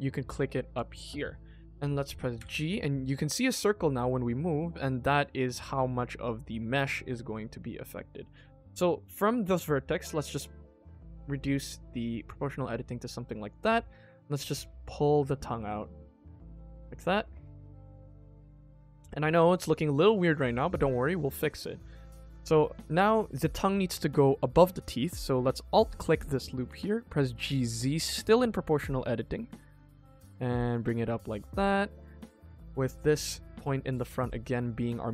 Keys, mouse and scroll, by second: 0.3 click, 1.2 middle click, 1.4 middle click, 2.3 g, 17.2-20.7 middle drag, 21.8 middle click, 25.6 alt+click, 26.6 g, 31.0 middle click, 31.8 click, 33.0 shift+middle click, 33.4-33.8 scroll up 1, 33.8 middle click.